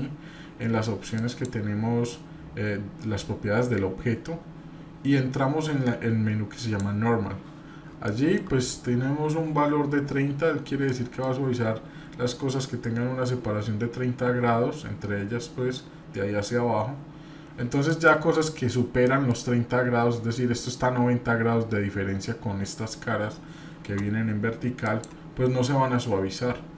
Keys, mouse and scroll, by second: 10.9 middle click, 18.4 shift+middle click, 19.0 middle click, 26.3 middle click.